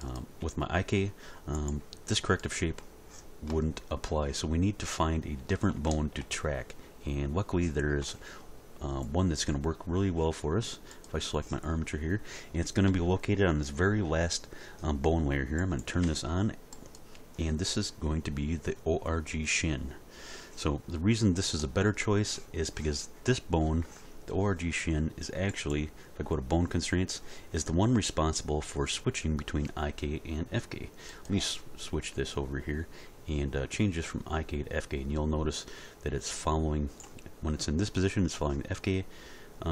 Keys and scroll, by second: 0.4 g.